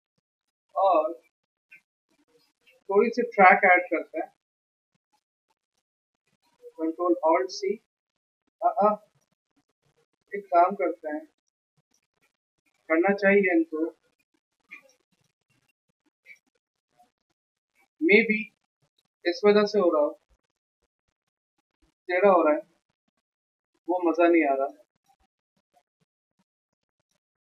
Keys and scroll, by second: 3.4 alt+Right, 3.9 alt+Right, 7.0 ctrl+alt+c, 8.6 ctrl+z, 10.8 ctrl+alt+2, 20.9 ctrl+alt+c, 22.7 a, 23.5 ctrl+z, 25.6 v, 27.3 v.